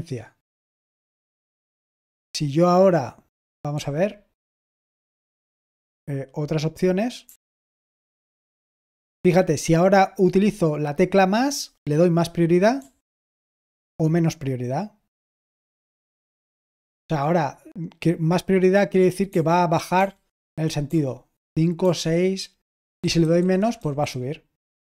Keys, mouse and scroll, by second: 1.5-2.2 typing, 7.1 typing, 19.9-21.7 typing, 22.9-24.2 typing.